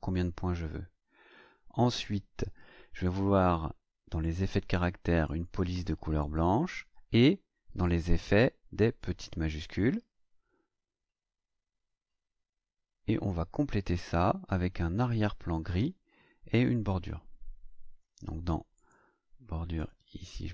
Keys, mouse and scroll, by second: 4.2 click, 5.2 click, 6.1 click, 7.8 click, 9.0 click, 18.7 click, 19.7 click.